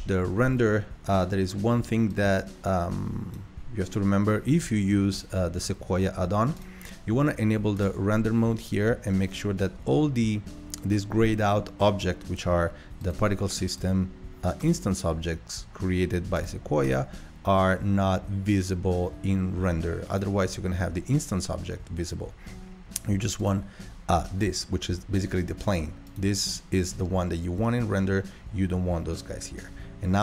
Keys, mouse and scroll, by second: 2.3-13.6 drag, 13.8 click, 14.6 click, 16.4-17.1 drag, 20.2 click, 23.6 click, 25.7 click, 26.1-27.0 drag.